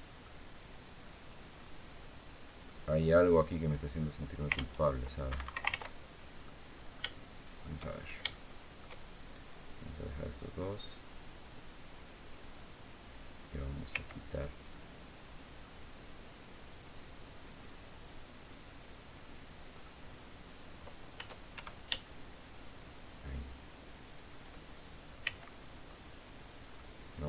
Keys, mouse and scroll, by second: 1.3-2.6 drag, 4.3 ctrl+z, 5.0 ctrl+Escape, 5.4 ctrl+z, 5.9 ctrl+scroll down 3, 6.2-7.5 drag, 7.7-8.0 shift+scroll up 2, 8.0 shift+click, 13.6 c, 14.5-15.5 drag, 19.5 click, 21.3 shift+Escape, 21.8-24.2 shift+drag, 25.0 c, 26.4 click.